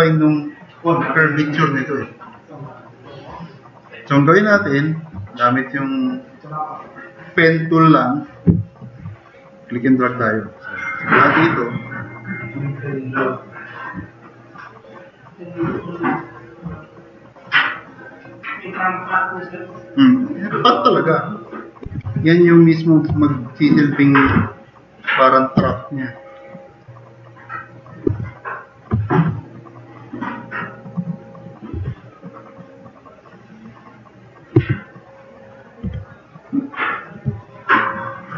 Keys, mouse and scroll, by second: 3.7 click, 10.7 click, 12.5-13.5 drag, 17.9-18.6 drag, 21.6-23.1 typing, 22.3 click, 24.3 t, 25.0 click, 25.6 e, 28.2 q, 28.3 click, 30.5 click, 31.7 r, 32.7-33.9 drag, 34.6 q, 35.3 click, 35.8 e, 36.2 click, 37.8-38.2 drag.